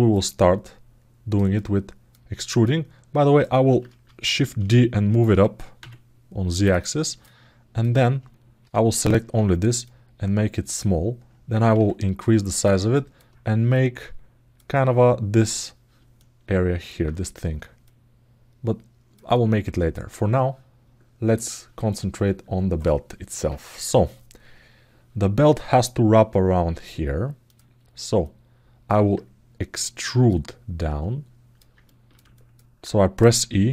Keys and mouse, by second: 1.3 alt+middle click, 2.4 alt+middle click, 4.2 shift+d, 6.4 click, 7.0 alt+middle click, 9.7 click, 12.7 alt+middle click, 15.9 alt+middle click, 17.6-18.9 drag, 19.1 alt+middle click, 28.0 alt+middle click, 31.6 ctrl+alt+middle click, 32.1 alt+shift+middle click, 33.1 e.